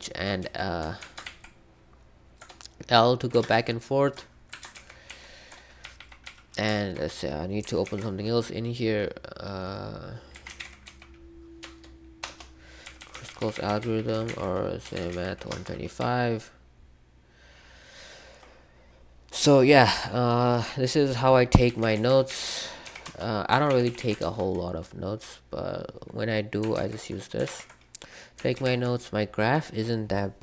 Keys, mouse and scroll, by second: 1.2 ctrl+l, 3.5 ctrl+k, 4.7 ctrl+h, 5.0 ctrl+l, 5.8 j, 5.9 j, 6.2 j, 7.8 ctrl+o, 10.2-11.6 typing, 12.2 Return, 12.8-18.1 typing, 21.5-24.4 typing, 26.7 ctrl+w, 27.4 ctrl+w, 28.5 ctrl+g.